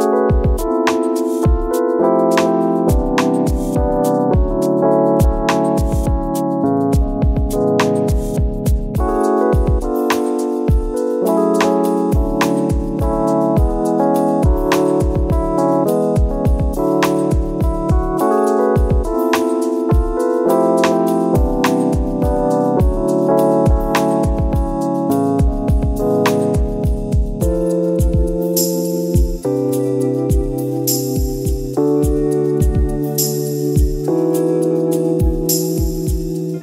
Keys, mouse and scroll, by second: 0.5 click, 2.4 scroll down 1, 2.6 scroll up 1, 2.9-3.2 scroll down 1, 3.2 `, 3.4 scroll up 1, 3.7 Tab, 4.0 3, 4.1 alt+click, 7.1 ctrl+KP_Add, 8.6 ctrl+KP_Subtract, 9.6 click, 11.9 click, 12.1 Tab, 12.3-12.7 scroll down 2, 13.7 Tab, 14.4 alt+click, 14.6 ctrl+KP_Add, 15.0 ctrl+KP_Subtract, 16.4 click, 16.5 Tab, 16.6-17.0 scroll down 1, 17.0 Tab, 17.3 alt+click, 17.8 2, 18.2 ctrl+KP_Add, 18.8 ctrl+KP_Add, 19.1 click, 19.3 Tab, 19.4 scroll down 1, 19.5 `, 19.7-20.2 scroll up 2, 20.2-20.6 scroll down 1, 21.4 click, 21.6 Tab, 21.8 `, 22.4 3, 22.5 alt+click, 22.8 ctrl+KP_Add, 24.0 click, 24.2 Tab, 24.6-25.3 scroll down 2, 24.8 a, 26.1 ctrl+s, 26.2 scroll up 1, 26.4 click, 26.6 Tab, 26.6 a, 27.1 u, 27.2 Tab, 28.0 click, 29.1-29.5 scroll down 2, 29.2 ctrl+s, 29.7 scroll up 1, 30.0 click, 31.1 scroll up 1, 31.6 scroll down 1, 32.5 scroll down 1, 32.8-33.2 scroll up 2, 33.4 click, 36.3 scroll up 1, 36.4 scroll down 1.